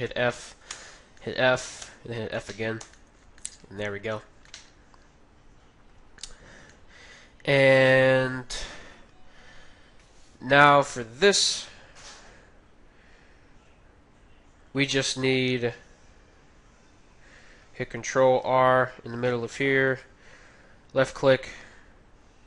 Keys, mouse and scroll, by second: 0.7 f, 1.8 f, 2.8 a, 6.0-8.5 middle drag, 18.4 ctrl+r, 20.0 ctrl+r, 21.8 ctrl+r.